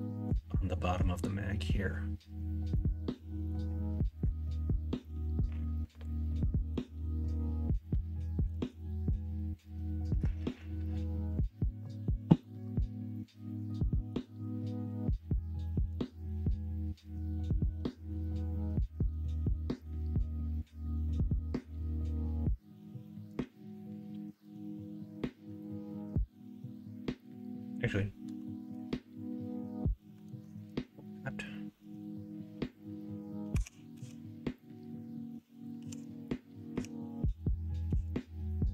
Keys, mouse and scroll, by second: 0.0 middle click, 2.7 middle click, 6.7 middle click, 8.5 middle click, 13.0 middle click, 13.8-14.9 middle drag, 15.7-16.8 middle drag, 17.7 middle click, 18.8 shift+middle click, 19.7 shift+middle click, 20.2-23.0 middle drag, 24.4 middle click, 28.3 KP_1, 28.7 KP_3, 30.2 alt+z, 33.5 e, 35.7 ctrl+z, 36.7 e.